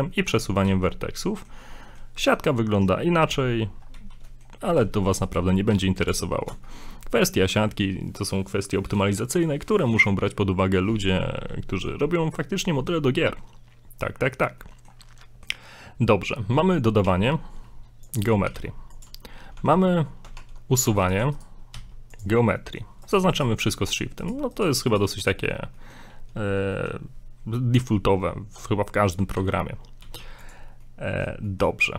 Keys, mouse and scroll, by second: 0.1 middle click, 0.7 z, 0.9 middle click, 1.7 middle click, 2.5 middle click, 3.6-3.9 scroll down 2, 3.9 scroll up 1, 3.9 z, 4.3 middle click, 4.7 right click, 5.3 shift+right click, 5.7 x, 6.7 shift+middle click, 11.7 shift+middle click, 12.4 scroll up 1, 14.6 middle click, 15.2 shift+middle click, 17.0 shift+a, 18.5 g, 19.5 Tab, 20.3 ctrl+Tab, 21.0 right click, 21.4 shift+right click, 21.8 x, 22.6 middle click, 23.1 right click, 23.3 shift+right click, 24.2 right click, 24.5 shift+right click, 24.9 shift+right click, 25.2 shift+right click, 25.8 middle click, 26.8 middle click, 28.2 middle click, 29.4 Tab, 30.0 x, 30.8 middle click, 31.5 shift+middle click.